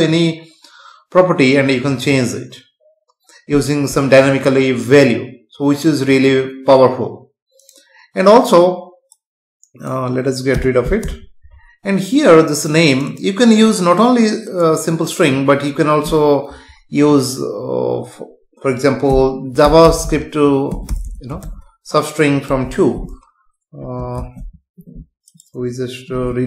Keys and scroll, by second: 10.6 BackSpace, 24.1 ctrl+s.